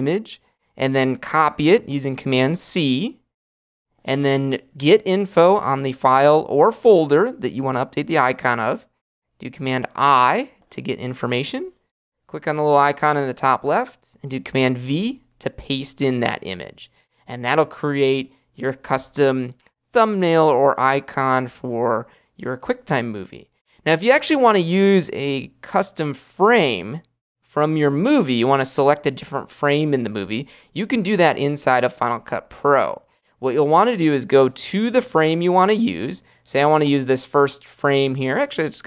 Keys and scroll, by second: 2.5 super+c, 9.8 super+i, 15.0 super+v.